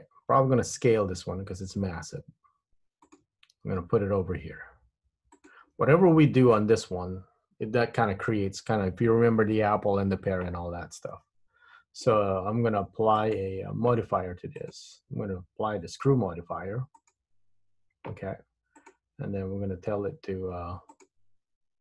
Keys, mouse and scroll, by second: 1.0 s, 3.8 g, 10.8-11.4 scroll up 3, 11.4-13.0 scroll down 1, 13.4 click, 14.8 click, 18.9 click.